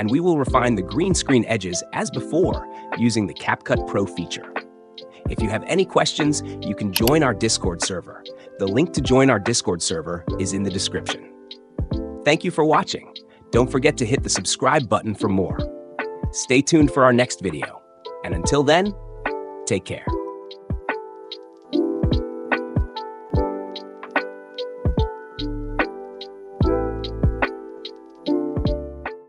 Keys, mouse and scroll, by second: 1.3 click, 2.5 click, 3.5 click, 5.7-6.2 drag, 7.7 click, 9.1 click, 12.7 Escape, 13.1 space, 21.3 click.